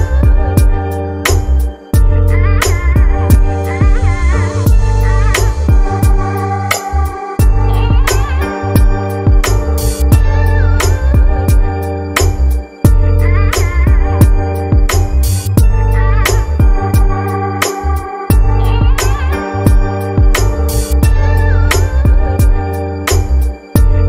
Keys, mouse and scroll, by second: 0.3-3.3 drag, 4.1 click, 6.6 click, 10.0 click, 12.1-13.2 drag, 14.4 click, 16.4 scroll up 2, 17.0 scroll down 1.